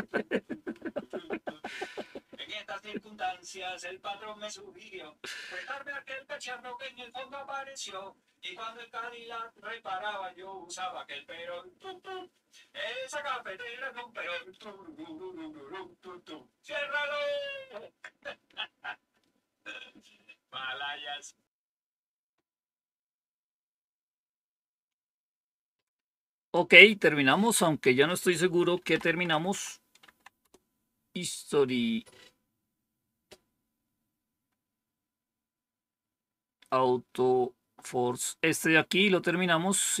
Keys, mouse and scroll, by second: 26.3 click, 28.4-29.7 typing, 29.9 Tab, 30.3 Return, 35.0-35.7 scroll down 2, 39.3-40.0 scroll down 3.